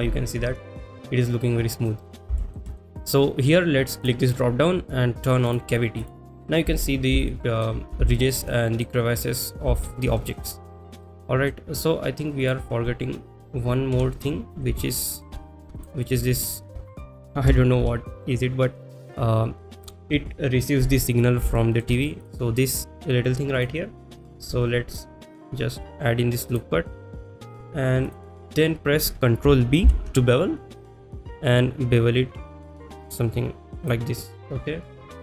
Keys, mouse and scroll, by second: 2.4 shift+middle click, 2.7 middle drag, 4.1-5.9 drag, 6.1 click, 6.5-6.8 middle drag, 7.3-7.7 shift+middle drag, 8.1 shift+middle click, 8.5-8.9 middle drag, 9.8 shift+middle drag, 10.2 middle drag, 10.9 middle click, 12.5 click, 14.0 KP_1, 14.8 shift+middle click, 15.8 click, 16.4 shift+middle click, 21.6 shift+middle drag, 22.3 click, 23.7-24.1 drag, 25.4 click, 26.6 click, 28.1 click, 32.4 ctrl+b.